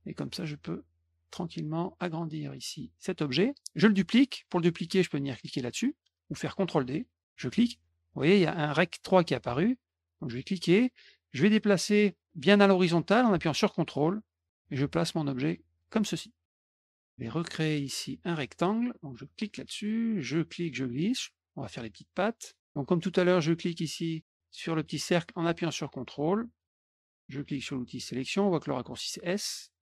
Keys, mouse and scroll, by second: 0.1 click, 7.2 click, 10.3-15.7 drag, 16.4 middle click, 19.2 click, 20.2-22.4 drag, 23.6-26.5 drag, 28.8 click.